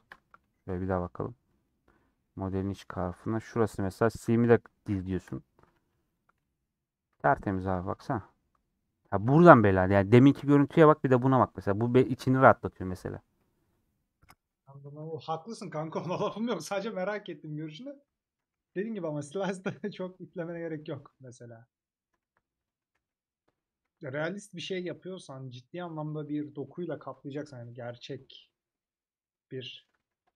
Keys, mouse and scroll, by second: 0.6 /, 1.0-1.4 scroll down 2, 1.5 middle click, 2.0 scroll down 1, 2.1-3.2 middle drag, 3.2 click, 3.9 /, 5.1 shift+click, 5.7 a, 6.7-7.4 scroll down 3, 6.9 middle click, 7.4 middle click, 7.8 Tab, 7.9-16.7 middle drag, 16.7 /, 17.8 Tab, 18.1 Tab, 19.6 /, 19.8 middle click, 20.4 Tab, 20.6 scroll down 2, 20.8-22.2 middle drag, 22.2 a, 22.3 middle click, 23.0 ctrl+z, 24.1 ctrl+KP_Add, 25.2 middle click, 26.1 3, 27.1 ctrl+KP_Add, 27.9 KP_Subtract, 28.8 scroll down 1, 28.9-29.9 middle drag, 29.9 3.